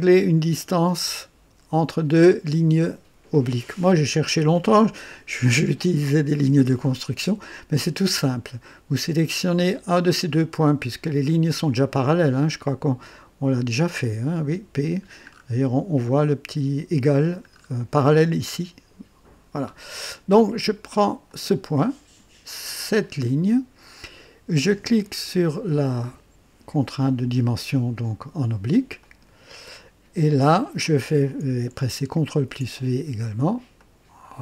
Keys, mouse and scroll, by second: 15.3-15.6 scroll up 1, 17.1 scroll down 1, 17.5-17.8 scroll up 1, 19.6-19.9 scroll down 1, 21.2 click, 23.1 click, 29.0 click, 32.3 ctrl+v, 33.8 click.